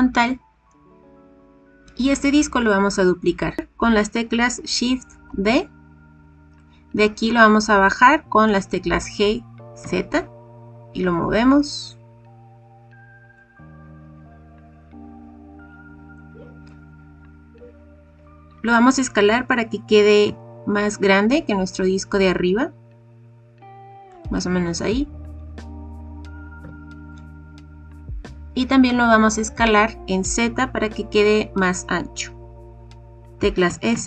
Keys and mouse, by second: 3.6 KP_1, 5.2 shift+d, 9.0 g, 9.8 z, 15.5 click, 16.1-16.6 drag, 20.2 s, 24.0 click, 26.5 KP_1, 33.6 s, 33.9 z.